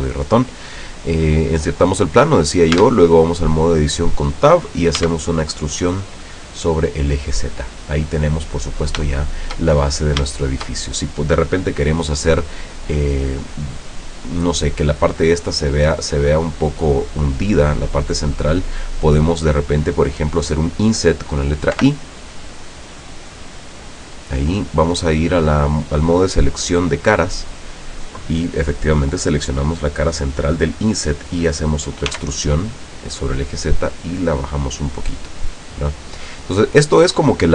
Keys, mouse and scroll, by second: 2.9 Tab, 5.1 e, 7.2 click, 7.9-8.5 middle drag, 9.2 shift+click, 10.1 shift+scroll up 3, 21.8 i, 23.8 click, 26.8 click, 27.9 right click, 32.2 e, 35.2 click, 35.7 scroll down 1, 36.0-37.3 middle drag, 37.3-37.5 scroll down 1.